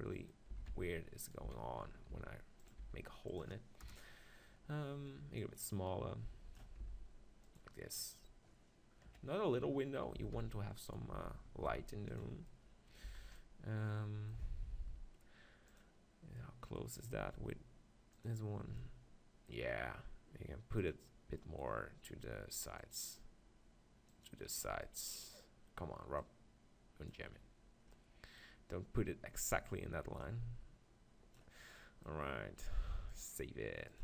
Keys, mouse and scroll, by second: 0.5 s, 1.5 s, 2.7-5.1 drag, 2.8 s, 3.8 KP_0, 5.4-7.3 drag, 6.8 s, 7.6-9.3 drag, 9.1 KP_3, 9.9-12.1 middle drag, 10.3 s, 11.1 s, 12.2-14.0 drag, 12.3 z, 13.0 z, 15.8 click, 16.5 middle click, 16.8-18.4 drag, 18.9-19.9 drag, 19.9 middle click, 20.8-26.0 drag, 24.8-27.9 right drag, 26.2-28.1 drag, 28.1-30.1 middle drag, 30.2-32.0 drag, 31.8-33.7 middle drag, 33.3-34.0 drag.